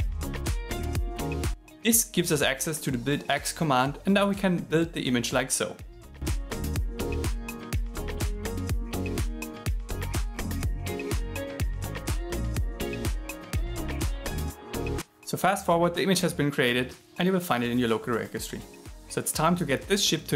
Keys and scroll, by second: 0.0-1.0 typing, 9.4 shift+7, 9.9 shift+7, 12.4 shift+7.